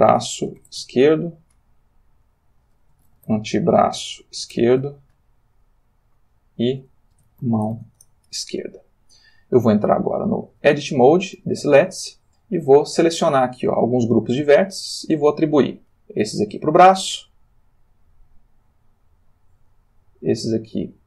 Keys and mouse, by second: 0.0-0.6 typing, 0.8 shift+Return, 2.0 click, 3.0-4.5 typing, 4.7 shift+Return, 5.9 click, 7.2 shift+a, 7.4 shift+o, 7.7 shift+e, 8.0 shift+Return, 10.5 Tab, 12.4-13.7 drag, 15.8 click, 17.9 click, 19.7-21.0 drag.